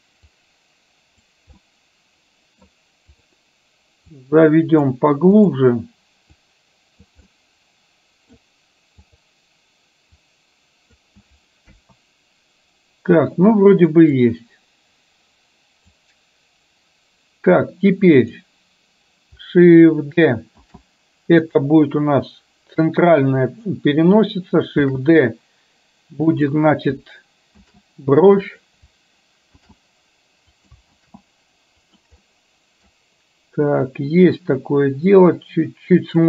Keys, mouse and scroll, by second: 0.5 click, 1.8 middle click, 3.4 click, 4.3 click, 5.5 click, 6.5 click, 7.4-8.5 middle drag, 9.1 click, 10.3 click, 11.8 KP_1, 14.1-16.0 drag, 18.3 click, 20.8 shift+d, 24.9 shift+d, 31.3 shift+d, 32.4 middle click, 34.0 click, 35.1-36.2 drag.